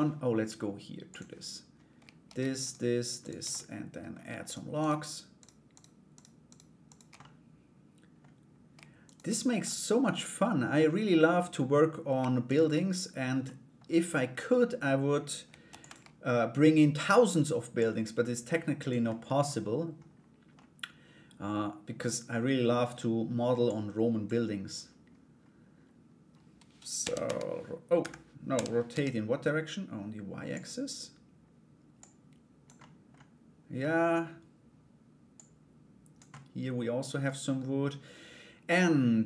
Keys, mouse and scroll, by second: 0.7 click, 2.2 shift+right click, 2.8 shift+right click, 3.1 middle click, 4.0 shift+right click, 4.4 shift+right click, 5.0 shift+right click, 5.3 shift+right click, 6.1 shift+right click, 6.5 shift+right click, 6.8 middle click, 8.6 shift+right click, 9.2-10.3 middle drag, 10.9 middle click, 12.0 shift+right click, 13.0 middle click, 14.1 middle click, 15.3 shift+d, 17.3-18.6 drag, 18.6 middle click, 20.1-21.6 middle drag, 23.2 click, 28.1 r, 31.5 click, 32.4 middle click, 33.4 middle click, 34.9 click, 35.9 middle click, 36.8 scroll down 1.